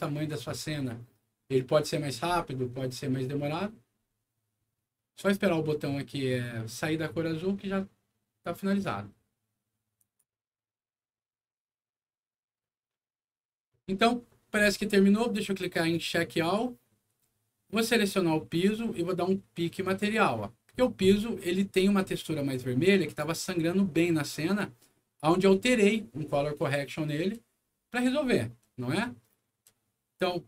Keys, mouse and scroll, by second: 9.9 click, 15.9 click, 17.8 click, 19.9 click, 21.6-22.4 scroll up 6, 22.4 middle click, 23.0 click, 23.2 click, 24.0 click, 24.9 middle click, 25.4 scroll down 1, 26.5 middle click, 28.8 middle click.